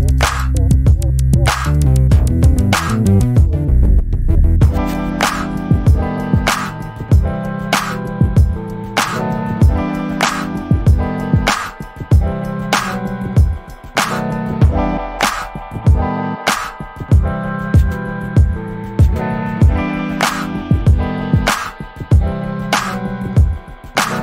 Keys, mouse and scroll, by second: 0.1 alt+click, 1.0 alt+middle click, 1.5 alt+click, 1.9-2.3 alt+scroll down 1, 2.3 alt+middle click, 2.7 alt+click, 3.4 alt+middle click, 3.8 alt+click, 4.6-5.3 scroll up 1, 5.3 alt+click, 7.6 alt+middle click, 8.2 alt+click, 9.4 alt+middle click, 9.9 alt+click, 10.7 alt+middle click, 11.7 click, 15.2 alt+middle click, 16.4 ctrl+shift+click, 19.1 right click, 21.3 click, 22.2 alt+middle click, 23.8 ctrl+click.